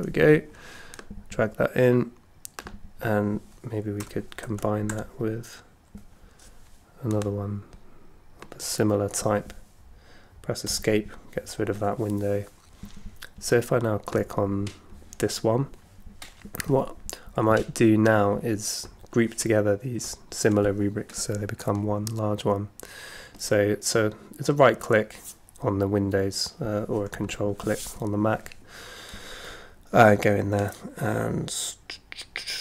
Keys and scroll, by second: 3.8-5.4 typing, 10.7 Escape, 12.0 Escape.